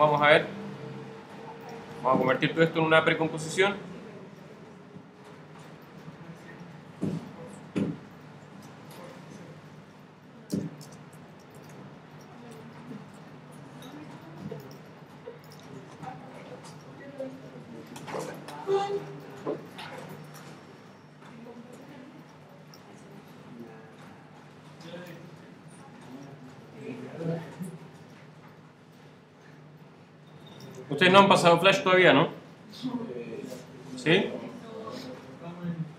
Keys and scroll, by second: 5.6 shift+super+c, 11.0 shift+space, 11.1 shift+f, 11.5 shift+o, 17.5 super+d, 24.2 super+d, 32.6 super+d.